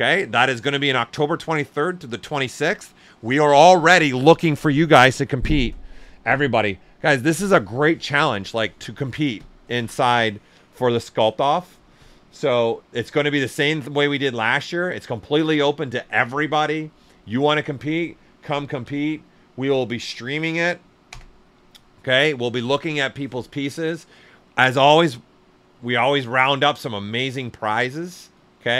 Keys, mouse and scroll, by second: 15.2 click, 15.2 typing, 18.1-19.3 typing, 21.0 Return, 28.1 click.